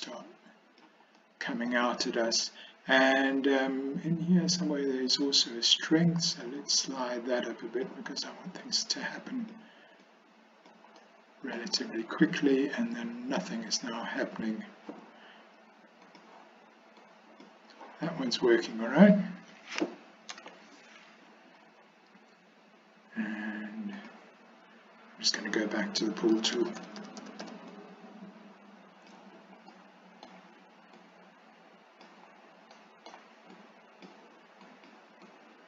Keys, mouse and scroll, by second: 1.2 middle click, 6.0-7.9 drag, 8.7 click, 10.1 click, 11.0 middle click, 12.3-14.3 drag, 16.2 click, 17.0 click, 20.4 ctrl+z, 24.1 click, 26.4-27.5 typing, 27.7-29.2 drag, 29.8 middle click, 31.0-32.1 drag, 32.8 middle click, 33.6 click, 34.8 click, 35.3 click.